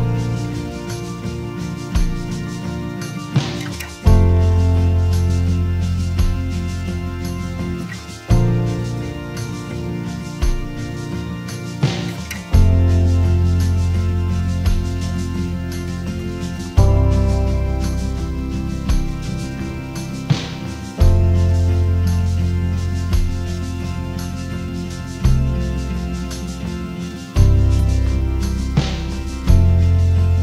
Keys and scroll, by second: 8.3 n, 8.8 space, 10.4 super+a.